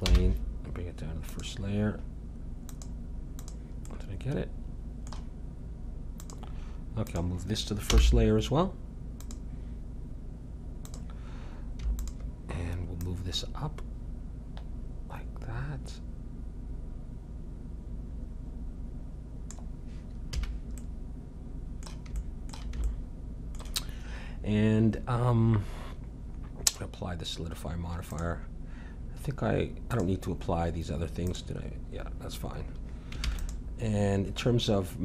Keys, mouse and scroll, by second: 0.1 m, 2.7-5.3 drag, 5.3 middle click, 6.2-8.6 drag, 7.9 m, 10.9-17.0 drag, 20.3 a, 20.8-25.6 middle drag, 26.7-33.2 drag, 33.2 ctrl+s.